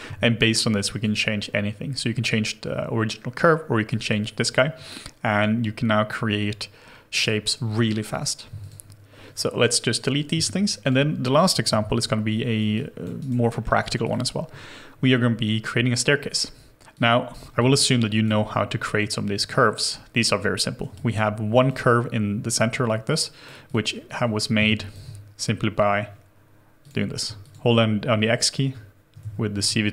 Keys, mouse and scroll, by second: 10.3 Delete, 11.6 shift+h, 12.3 scroll down 1, 12.6 scroll, 12.7 alt+click, 13.2 alt+right click, 13.5 alt+middle click, 17.5 alt+click, 20.9 alt+click, 23.9-24.5 scroll down 1, 24.5 space, 27.2 x, 29.2 ctrl+z.